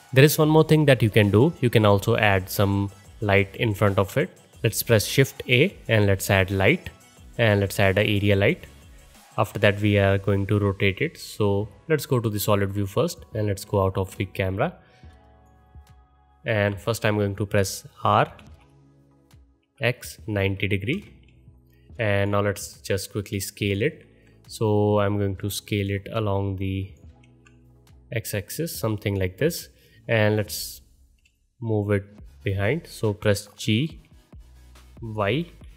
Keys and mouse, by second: 0.1-0.7 drag, 1.6-4.0 middle drag, 4.0-11.7 drag, 5.0 shift+a, 12.1 middle click, 13.5 KP_0, 13.7-16.3 drag, 18.4 r, 23.1-25.1 alt+shift+drag, 27.2 ctrl+z, 33.6 g.